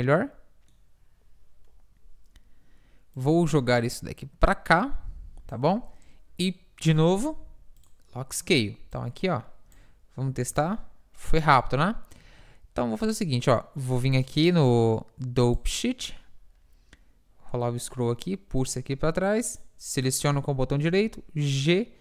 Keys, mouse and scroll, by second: 3.2-5.0 drag, 9.0-11.6 drag, 10.4 alt+a, 11.6 alt+a, 12.3 Escape, 14.2-16.3 drag, 18.7 click, 19.6-20.6 middle drag, 21.1 g.